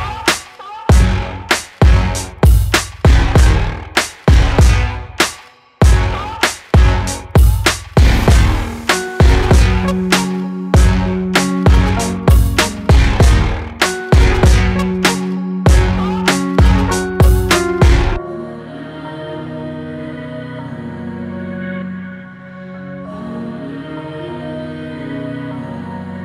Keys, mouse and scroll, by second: 2.1 alt+middle click, 3.1 g, 5.6 alt+middle click, 6.1 scroll up 3, 6.4-7.1 shift+middle drag, 7.1 s, 12.6-13.2 middle drag, 13.2 scroll down 4, 13.6-14.4 middle drag, 14.4 s, 16.4 alt+middle click, 16.6 alt+middle click, 16.9 scroll up 2, 17.2-17.9 shift+middle drag, 17.9 alt+z, 19.9-20.4 scroll up 5, 20.4-22.1 shift+middle drag, 22.1 click, 23.4 scroll down 1, 24.4 g, 25.6 alt+middle click, 26.1 scroll up 1.